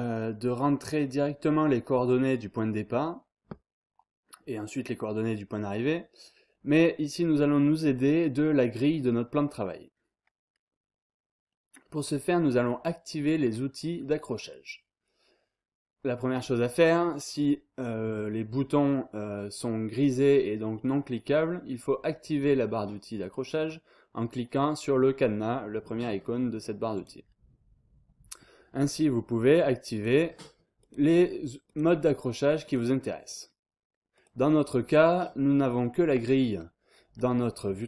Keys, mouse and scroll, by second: 26.9 click, 29.9 click, 30.8 click, 31.6 click, 32.6 click, 34.1 click.